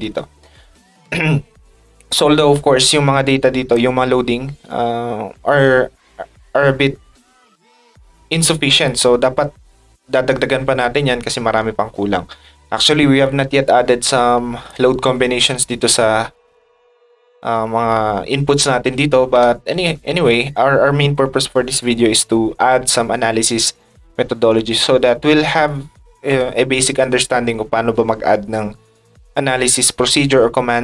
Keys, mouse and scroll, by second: 2.5 ctrl+click, 3.5 ctrl+click, 13.6 ctrl+shift+click.